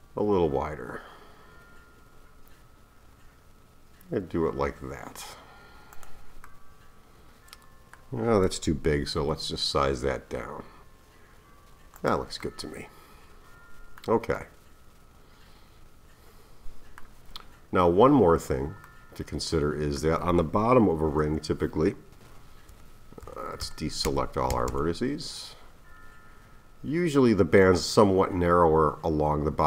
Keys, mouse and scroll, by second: 6.5-9.1 middle drag, 9.1 s, 12.4-17.4 middle drag, 17.4-18.0 scroll down 1, 18.0-18.9 scroll up 1, 18.9-21.2 middle drag, 21.2 KP_1, 22.7-24.7 typing, 25.8-26.7 scroll down 2, 26.7-28.8 scroll up 2.